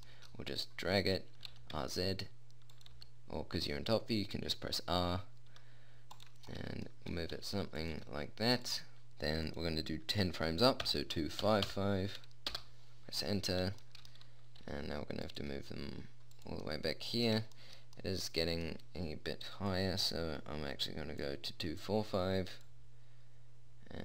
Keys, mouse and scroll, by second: 1.8 r, 3.3 g, 6.8-9.1 middle drag, 7.8 r, 8.3 g, 9.8-11.6 drag, 12.0 5, 14.2-15.4 middle drag, 15.0 r, 15.8 g, 18.6-20.0 middle drag, 20.0 click, 20.8 middle click, 21.2 click, 23.2 middle click, 23.8 click.